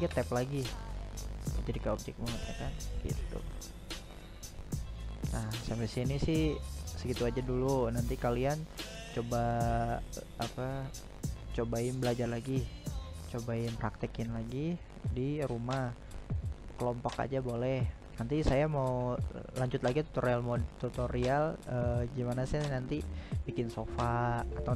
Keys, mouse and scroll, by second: 0.3 right drag, 0.9-6.9 middle drag, 6.9-7.3 scroll up 1, 7.3-10.9 middle drag, 10.9 right drag, 11.6-12.5 middle drag, 12.5-13.0 right drag, 13.0-14.0 middle drag, 14.0 scroll down 2, 14.3-14.6 scroll up 1, 14.6-18.6 middle drag, 22.8 right drag, 23.1-24.5 right drag.